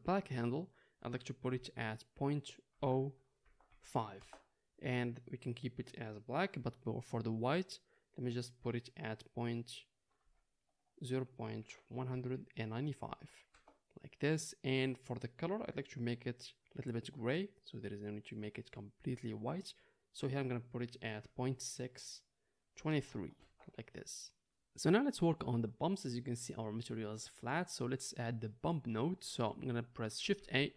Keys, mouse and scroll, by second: 15.9-30.7 middle drag, 30.3 shift+a.